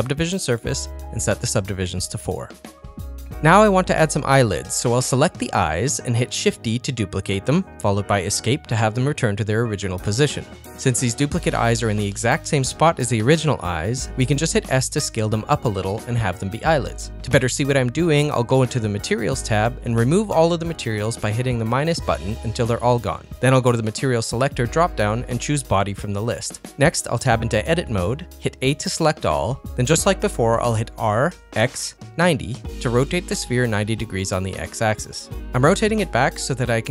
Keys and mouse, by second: 1.2 click, 1.4 click, 1.5 middle click, 1.7 middle click, 2.4 ctrl+middle click, 2.6 shift+middle click, 2.8 middle click, 3.1 middle click, 3.4 middle click, 3.7 middle click, 4.6 click, 5.1 shift+middle click, 5.5 middle click, 7.3 shift+d, 14.5 s, 23.0 click, 23.5-26.9 drag, 27.8 Tab, 28.5 a, 30.5 r, 35.4 Tab, 35.9 middle click, 36.2 Tab, 36.8 KP_1.